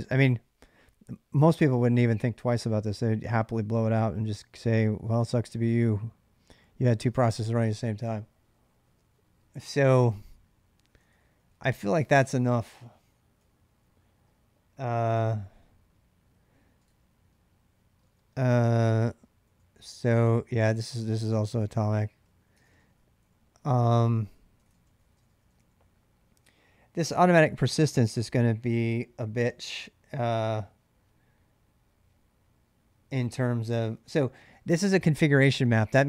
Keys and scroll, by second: 10.7-14.2 typing, 16.7 shift+a, 17.8-19.7 typing, 20.9-23.1 typing, 23.8 ctrl+[, 24.3-27.3 typing, 29.2-29.9 typing.